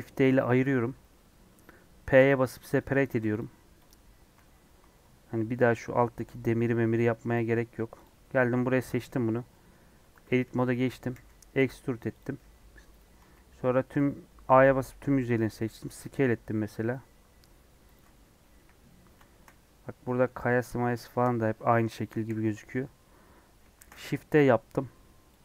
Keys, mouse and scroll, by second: 2.7 p, 3.0 Tab, 3.3 click, 3.8 click, 4.3 alt+z, 7.3 click, 7.5 middle click, 8.0 click, 8.8-10.0 middle drag, 10.0 Tab, 10.2 a, 11.1 e, 13.2 a, 15.1 s, 18.5 KP_1, 20.7-22.1 middle drag, 22.1 KP_1, 22.4 KP_Decimal, 23.0 scroll down 1, 23.3 scroll up 2, 23.7 shift+d.